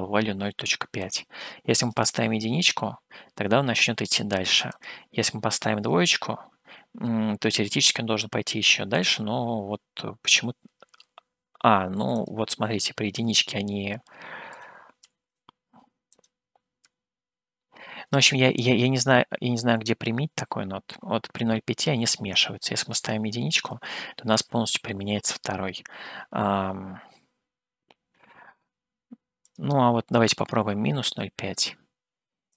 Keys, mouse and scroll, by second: 1.0-6.0 drag, 12.4-19.7 drag, 22.9-25.0 drag, 29.4-32.5 drag.